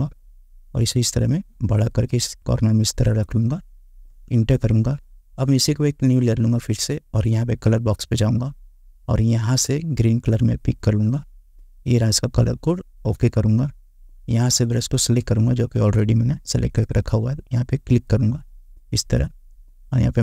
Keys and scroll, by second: 4.2 Return.